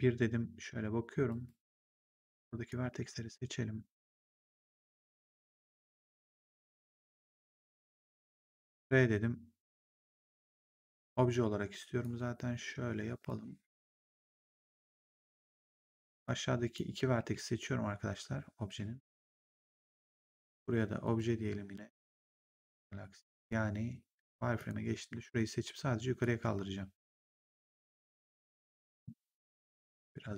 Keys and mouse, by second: 1.2 right click, 2.8 w, 4.3 click, 8.2 r, 10.1 click, 11.9 click, 16.1 click, 17.0 w, 18.5 w, 20.9 click, 22.1 click, 24.5 click, 26.1 click, 28.2 click.